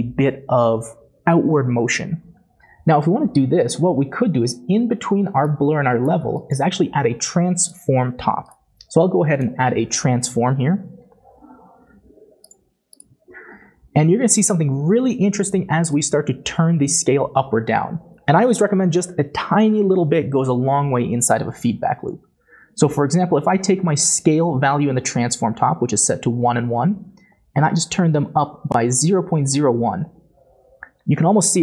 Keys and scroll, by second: 10.3 typing.